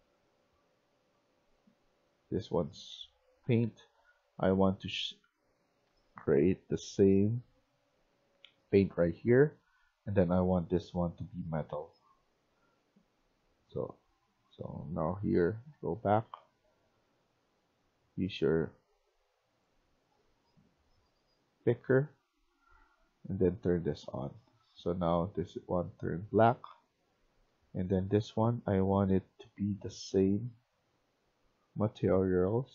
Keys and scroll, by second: 0.8-2.0 typing, 3.0-3.8 typing, 5.8 e, 6.2 e, 8.0-8.9 w, 9.5 e, 15.5 ctrl+z, 15.9 Escape, 16.1 Escape, 23.9 Escape, 24.1 Escape, 24.4-32.7 typing.